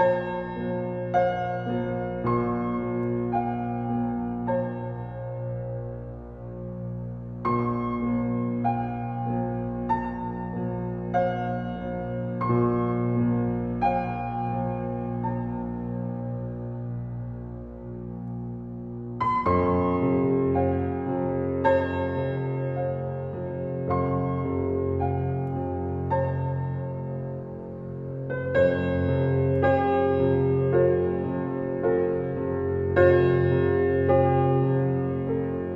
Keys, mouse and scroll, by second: 0.1-3.5 drag, 4.8 click, 5.3 middle click, 7.0-7.5 middle drag, 18.5 click, 18.8-19.6 scroll down 7, 19.6-21.1 middle drag, 21.1 click, 21.6 Tab, 22.5 click, 22.8 alt+middle click, 23.2 click, 23.4 shift+middle click, 23.6-24.0 scroll up 4, 24.0 shift+middle click, 24.6 e, 26.9 s, 28.6-31.3 middle drag, 31.3 alt+click, 32.2 e, 35.6 click.